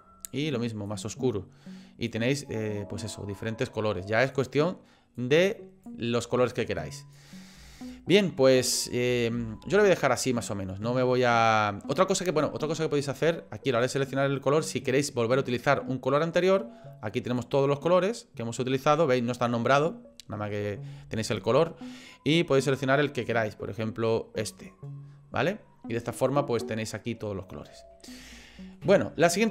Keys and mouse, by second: 4.3 click, 7.8 shift+middle click, 9.4 shift+d, 13.8 click, 17.3 click, 28.4 shift+middle click.